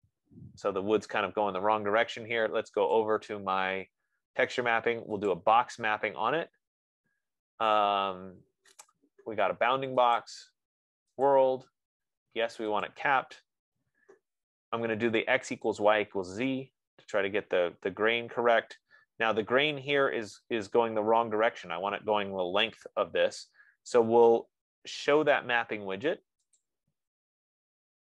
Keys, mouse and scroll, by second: 3.1 scroll, 3.3 click, 5.7 click, 10.7 click, 11.6 click, 13.4 click, 16.2 click, 26.9 click, 27.6 F15.